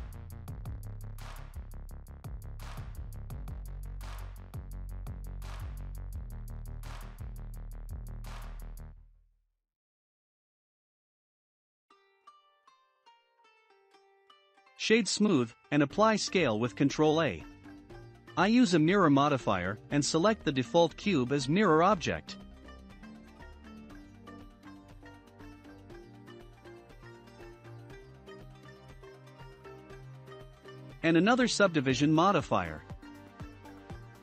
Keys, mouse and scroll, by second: 3.0-4.7 shift+middle drag, 4.7 Tab, 5.2 2, 5.4-8.2 drag, 8.2 Tab, 8.6-8.9 scroll down 2, 8.9-9.8 middle drag, 9.8 click, 12.0-12.9 shift+middle drag, 12.9-13.3 scroll up 4, 13.7-15.6 right drag, 15.6 ctrl+a, 18.1 click, 20.6-21.1 drag, 21.1-21.5 scroll down 2, 21.6-21.9 middle drag, 21.9-22.4 scroll down 2, 23.4 click, 26.3 click, 27.6 click, 31.8-34.2 drag.